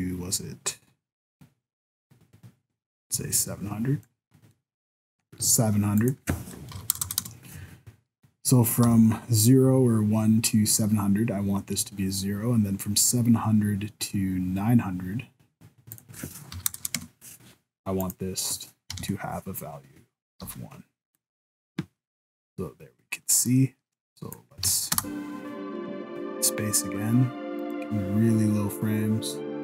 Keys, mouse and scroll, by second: 4.5 middle click, 6.0 click, 7.0 KP_0, 8.9 i, 15.9 click, 16.8 KP_0, 18.0 click, 20.5 i, 21.1 right click, 22.5 click, 24.6 alt+a, 25.0 space, 27.7 right click.